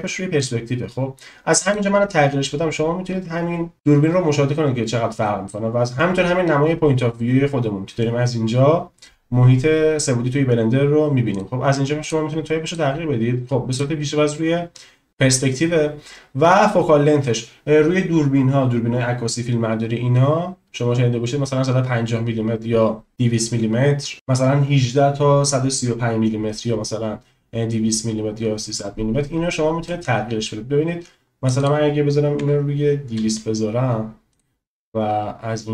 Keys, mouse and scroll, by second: 0.3-1.9 drag, 11.3-12.3 drag, 12.7-14.0 drag, 30.1-34.5 drag, 33.2 0.